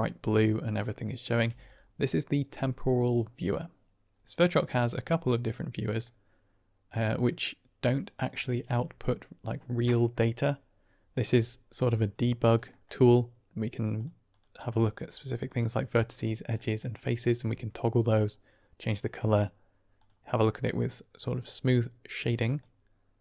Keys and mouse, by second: 1.4 typing, 4.2 middle click, 6.1-7.0 middle drag, 12.7 middle click, 13.8 click, 14.2 click, 14.6 click, 14.9 click, 15.4 click, 16.0 click, 16.6 middle click, 19.9 click, 20.8-21.1 middle drag, 22.3 click, 23.1 click.